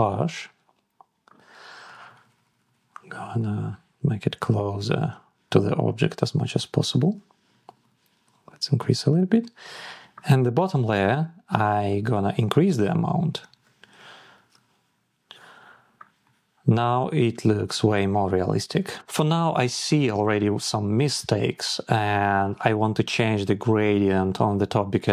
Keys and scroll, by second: 1.1 Down, 1.7 Down, 2.4 Down, 3.0 Down, 3.5 Up, 3.9 Down, 4.2 Up, 5.0 Down, 6.8 Up, 7.3 Up, 8.2 Down, 8.5 Up, 8.7 Down, 13.5 Up, 14.0 Up, 15.7 shift+Up.